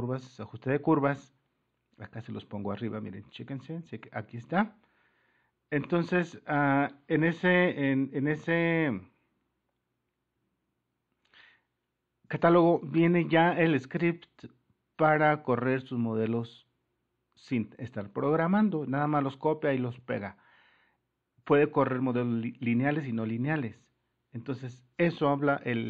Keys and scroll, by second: 7.4-8.4 typing.